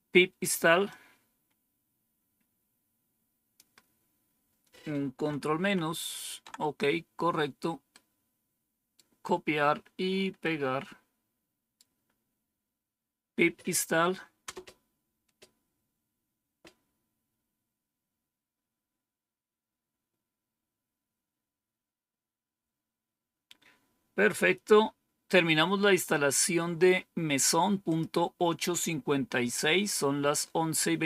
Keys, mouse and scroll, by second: 0.8-3.5 drag, 5.5 ctrl+-, 7.8-8.9 right drag, 10.3-12.4 right drag, 14.3 Return, 27.7 click, 30.1-31.0 scroll down 2.